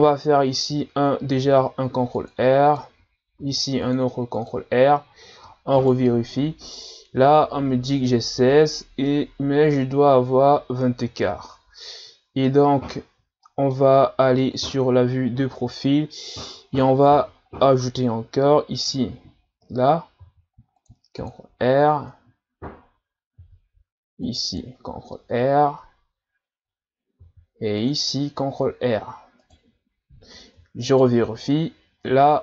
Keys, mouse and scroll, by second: 1.5 ctrl+r, 3.4 ctrl+r, 5.8 alt+right click, 9.1-12.1 middle drag, 13.0-13.4 scroll up 1, 13.4-14.6 middle drag, 14.6 KP_3, 15.6-17.4 scroll up 2, 17.4-18.8 scroll down 2, 20.2 ctrl+r, 21.9-22.9 scroll down 1, 23.4 ctrl+r, 25.7-26.9 scroll down 1, 27.2 ctrl+r, 30.8 alt+right click.